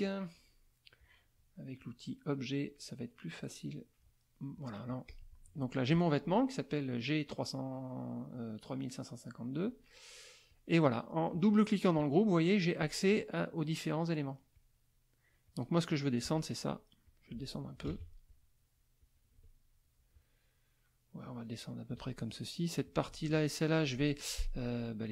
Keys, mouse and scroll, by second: 0.0 click, 1.0 click, 1.8 click, 2.2 click, 2.6 click, 3.4 click, 4.7 middle click, 5.1 click, 5.5 click, 9.6 click, 10.5 click, 12.8 click, 14.2 click, 15.4 click, 17.0 ctrl+click, 17.9 ctrl+z, 18.3 ctrl+click, 19.0-22.1 drag, 22.3 ctrl+click, 23.1 shift+click.